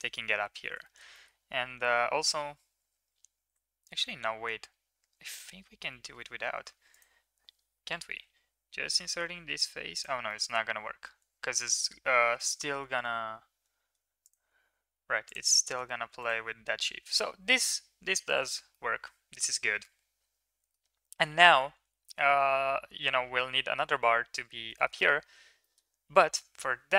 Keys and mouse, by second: 0.2 Tab, 0.8 middle drag, 1.1 middle click, 1.7 Tab, 3.6 ctrl+z, 5.3 ctrl+z, 5.7 ctrl+z, 6.8 click, 8.1 i, 10.2-10.5 middle drag, 12.1 ctrl+r, 15.2 click, 15.7 Tab, 16.8 ctrl+s, 18.6-20.6 middle drag, 21.5 Tab, 22.0 shift+middle click, 22.2 middle click, 24.7 shift+middle click, 24.9 middle click, 25.6 middle click.